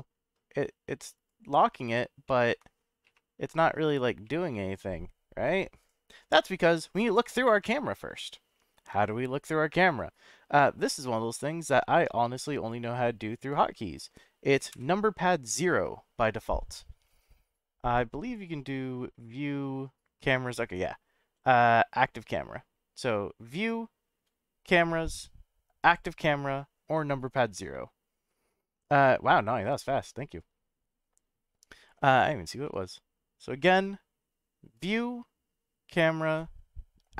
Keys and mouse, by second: 1.1 click, 1.6 click, 2.2-2.6 middle drag, 3.2 F12, 5.9 F12, 10.8-11.5 middle drag, 12.5-13.7 drag, 13.7 middle drag, 14.7 KP_0, 17.0-17.7 middle drag, 23.6-25.9 drag, 32.6-33.6 middle drag, 34.7-37.1 drag.